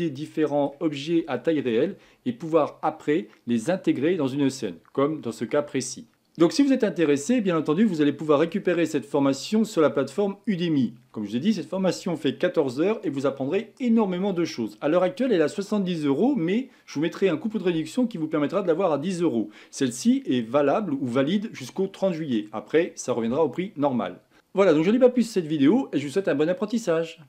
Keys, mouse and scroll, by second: 1.0-1.4 scroll down 2, 1.4-4.5 shift+middle drag, 6.1 shift+middle click, 7.5-10.7 middle drag.